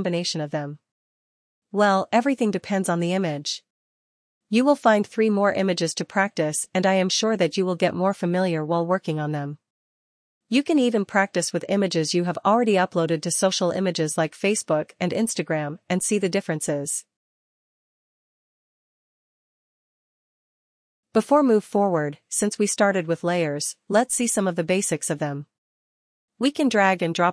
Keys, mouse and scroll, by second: 5.2 click, 7.2 click, 8.8 click, 9.9 click, 10.8 click, 11.8 click, 12.8 click, 14.0 click, 16.6 click, 20.9 click, 24.7 click, 26.0 click.